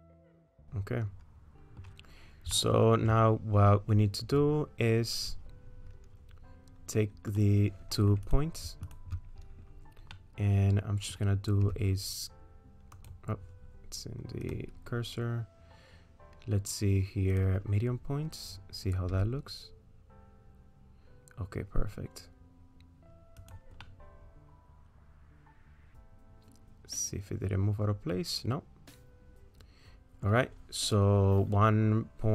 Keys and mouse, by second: 0.4-1.8 middle drag, 2.6 shift+middle click, 8.3 click, 10.2-11.2 middle drag, 11.7 s, 14.4-17.4 drag, 19.1 s, 23.9-30.3 middle drag.